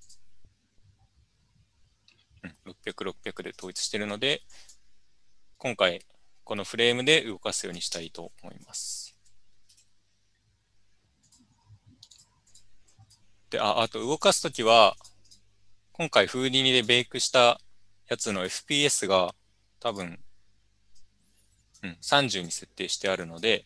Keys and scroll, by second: 8.0 Tab, 9.0-10.3 typing.